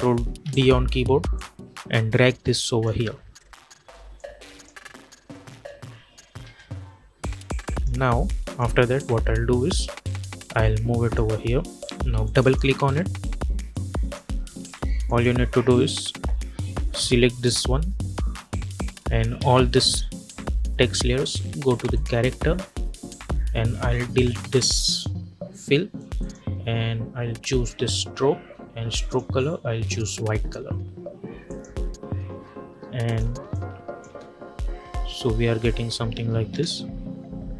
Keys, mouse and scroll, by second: 0.3 ctrl+d, 1.2-5.4 drag, 5.4 space, 7.3 click, 9.1 =, 9.3 =, 9.4 =, 10.0-14.9 drag, 19.3 ctrl+a, 21.8 click, 24.8 click, 29.0 click, 31.3 click, 33.9 space, 36.4 space.